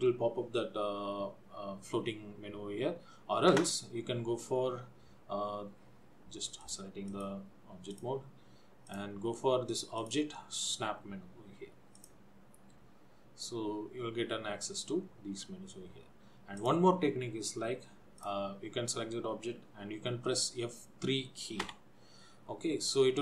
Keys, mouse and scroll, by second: 6.8 click, 7.3 click, 8.9 click, 10.1 click, 16.9 click, 18.3 click, 21.3 click.